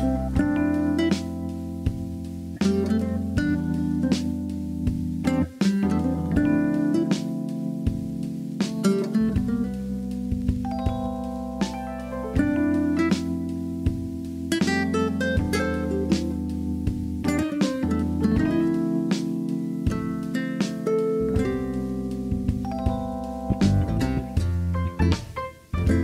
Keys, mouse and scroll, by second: 2.0-5.9 drag, 5.9 Tab, 6.4 click, 7.1 Tab, 7.5 click, 9.8 click, 10.9 e, 12.2 s, 12.6 click, 12.8-13.9 drag, 13.9 shift+middle click, 15.3 ctrl+r, 18.5-23.7 drag, 24.5 Tab, 24.9-25.3 middle drag, 25.8 alt+z.